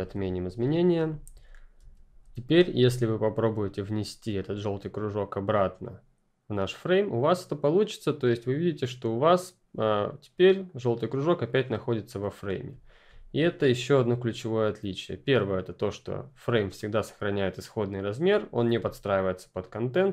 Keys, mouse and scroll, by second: 0.6 click, 1.0 ctrl+z, 4.4 click, 9.4 click, 16.7 click, 20.0 click.